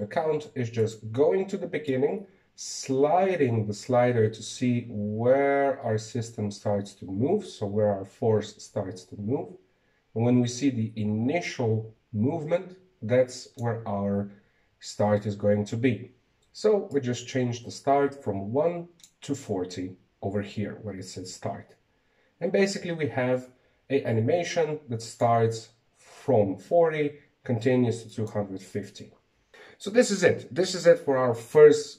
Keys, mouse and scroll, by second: 0.0 click, 0.6-1.1 scroll up 3, 1.1 shift+middle click, 1.3 scroll down 2, 2.8-6.7 drag, 27.1 click, 30.0-31.9 drag.